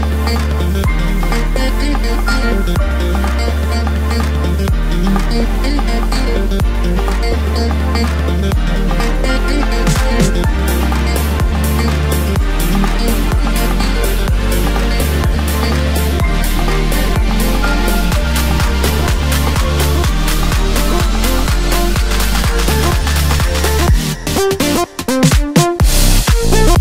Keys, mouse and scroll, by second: 0.9 middle click, 1.6 KP_7, 2.2-3.4 scroll down 1, 3.4 ctrl+r, 7.1-8.8 drag, 8.8 ctrl+r, 11.5 3, 12.1 click, 13.9 i, 15.5-16.6 scroll down 1, 16.6-19.8 drag, 24.3-24.9 scroll up 1, 24.9-26.8 right drag.